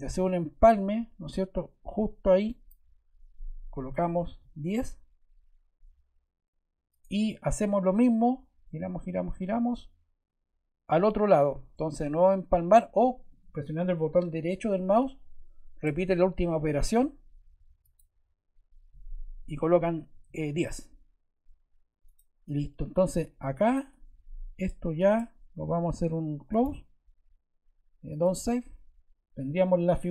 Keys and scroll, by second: 4.2 1, 5.3 0, 19.8-20.6 typing.